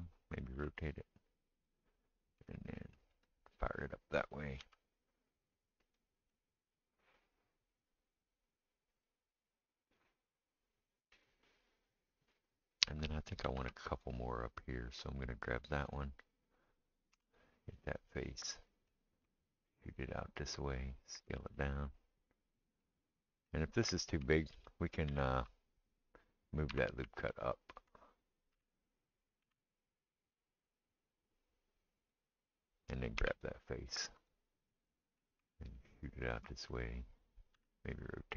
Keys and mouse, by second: 0.5 r, 3.1 ctrl+right click, 3.3-17.2 ctrl+middle drag, 4.6 s, 13.4 ctrl+r, 17.1 3, 17.2 click, 17.4-27.2 middle drag, 21.3 s, 24.5 ctrl+z, 25.1 ctrl+z, 26.7 2, 27.2 alt+click, 27.3-33.3 alt+middle drag, 28.5 g, 33.2 3, 33.3 click, 33.4 middle click, 34.2 click, 34.3-35.6 middle drag, 35.6 ctrl+right click, 35.8-38.3 ctrl+middle drag, 37.5 r.